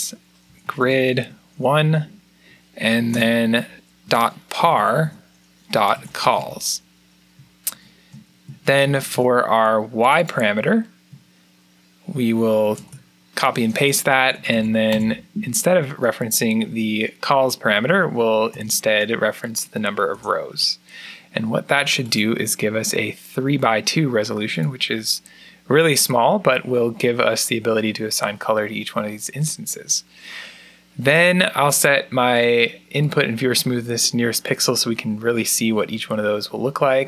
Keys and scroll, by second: 0.0-6.7 typing, 7.5 shift+Home, 8.8 ctrl+c, 12.6 ctrl+v, 14.0 BackSpace, 14.2 BackSpace, 14.3 BackSpace, 14.7 BackSpace, 17.3-18.7 typing, 20.0 Return.